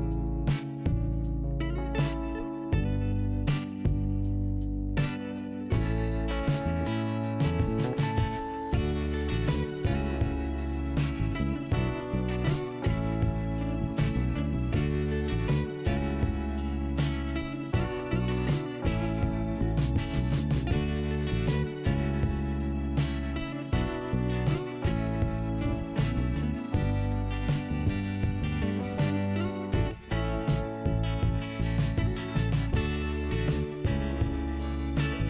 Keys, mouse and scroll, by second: 4.3 click, 4.4 click, 5.0 click, 7.5 click, 13.2 click, 13.3 click, 15.1 click, 15.9 click, 16.7 click, 19.1 click, 22.1 click, 23.1 click, 25.6-26.7 scroll down 1, 27.1 click, 28.7 click, 31.7 scroll up 1, 34.9 click.